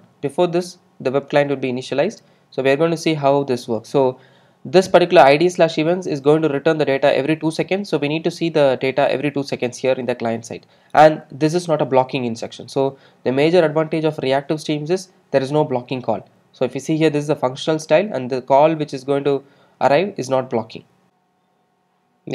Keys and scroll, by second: 21.7 alt+super+r.